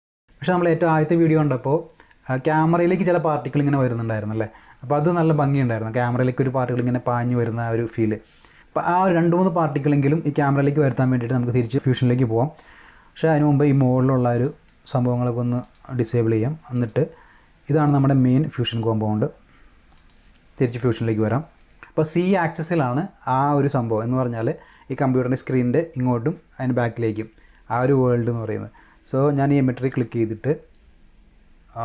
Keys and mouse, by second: 8.0 click, 13.2 click, 14.3 click, 15.6 click, 16.7 click, 18.7 click, 19.9 click, 29.9 click.